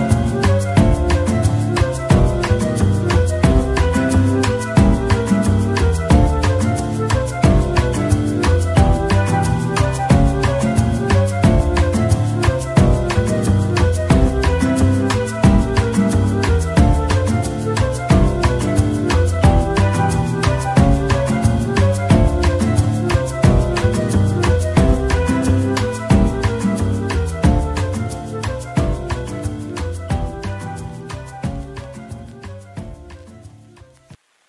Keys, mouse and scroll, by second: 2.9 Tab, 3.6 Tab, 4.0 Tab, 4.6 Tab, 15.8 Tab, 23.1 scroll down 1, 23.4 middle click, 23.9-24.6 scroll down 1, 24.6 z, 31.5 middle click, 32.1 scroll up 1, 32.4 z.